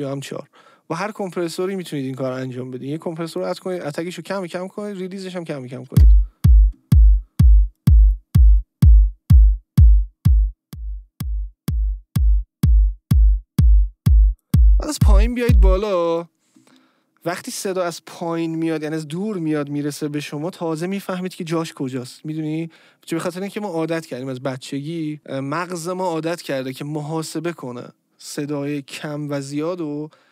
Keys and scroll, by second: 5.8 space, 15.8 space.